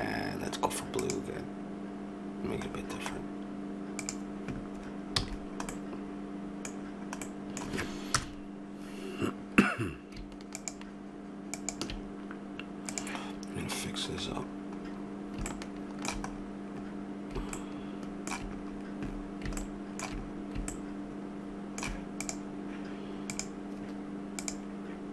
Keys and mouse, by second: 5.2 a, 5.3 middle click, 8.1 KP_0, 10.5-14.8 drag, 14.9-22.2 middle drag, 22.2-25.1 drag.